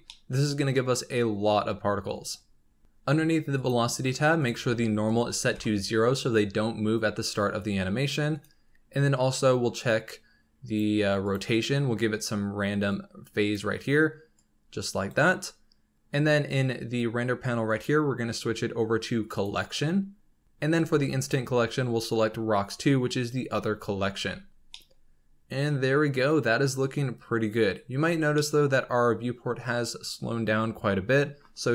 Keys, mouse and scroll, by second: 0.1-1.5 middle drag, 1.5 scroll up 3, 2.8-3.5 scroll down 5, 3.5-7.4 drag, 8.3-20.4 drag, 10.6-17.6 middle drag, 21.2-24.3 drag, 24.3-24.7 scroll down 2, 24.7-26.8 middle drag, 26.8-28.2 scroll up 2, 28.2 scroll down 2, 28.4-30.5 middle drag, 30.5-31.0 scroll up 2, 31.3-31.7 scroll down 3.